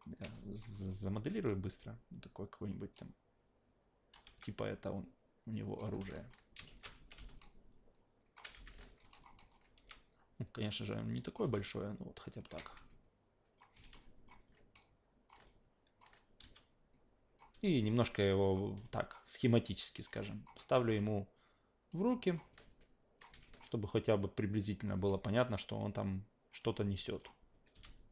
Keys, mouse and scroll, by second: 0.4 alt+right click, 0.6 alt+middle click, 0.9 alt+click, 1.5-2.7 drag, 2.9-4.1 drag, 4.2 r, 4.9-5.8 drag, 5.8-8.5 typing, 6.1 alt+click, 7.3-8.3 drag, 8.9 alt+right click, 9.1 alt+drag, 9.4 alt+middle click, 9.7 r, 10.6-11.3 drag, 11.4 e, 11.9-12.5 drag, 12.9-13.6 drag, 13.7 w, 14.0 alt+drag, 14.7-15.3 drag, 15.5 alt+click, 16.4 e, 16.9-17.4 drag, 17.5 w, 18.0-18.5 drag, 18.8 alt+drag, 19.7-20.0 drag, 20.2 alt+drag, 20.6 alt+middle drag, 20.9 w, 21.3-22.3 drag, 22.6 alt+click, 23.3 w, 23.9-24.8 drag, 25.1 alt+drag, 25.8-26.5 drag, 26.7-27.2 alt+drag, 27.7 e.